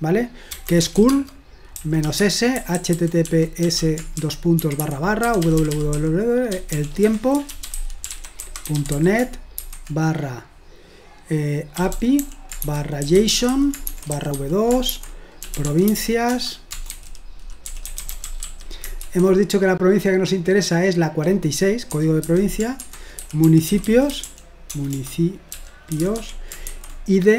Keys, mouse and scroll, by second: 0.5-9.6 typing, 11.8-19.0 typing, 21.9-26.7 typing.